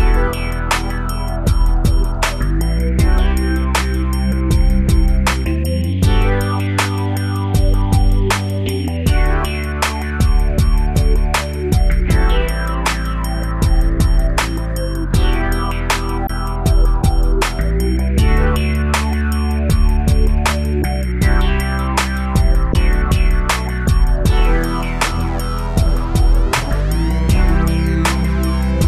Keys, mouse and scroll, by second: 0.3 click, 0.4 click, 1.1 Delete, 1.2 Delete, 1.3 Return, 3.1 click, 6.9 click, 9.2 g, 10.5 click, 10.7 click, 11.6 click, 11.7 click, 12.6 shift+space, 13.6 Escape, 14.8 click, 18.9 g, 19.4 Escape, 20.0 Up, 20.5 Down, 21.7 typing, 24.8 click, 25.7 scroll up 1, 26.2-27.3 scroll down 3, 27.3 shift+space, 28.5 Escape.